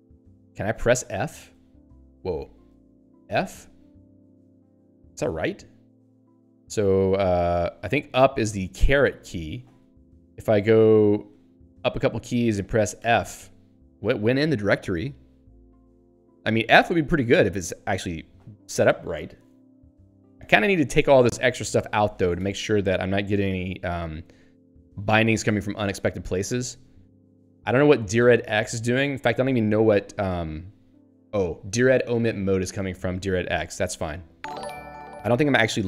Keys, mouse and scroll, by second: 0.3 q, 2.7 super+e, 3.3 f, 4.5 super+e, 8.8 ^, 11.5 ctrl+p, 13.0 f, 21.4 q, 26.3 Down, 26.5 Return, 26.8 Down, 27.2 Up, 29.3 Down, 30.5 Right, 31.5 Up, 31.9 Down, 32.4 Left, 33.6 Up, 35.4 Down.